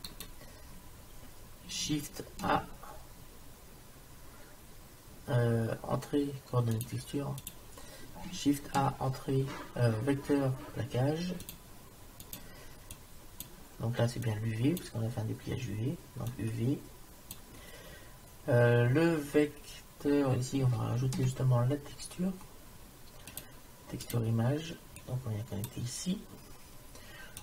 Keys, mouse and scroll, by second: 2.6 shift+a, 8.7 shift+a, 13.0-14.8 drag, 16.1 click, 21.0 shift+a, 25.0-26.6 drag.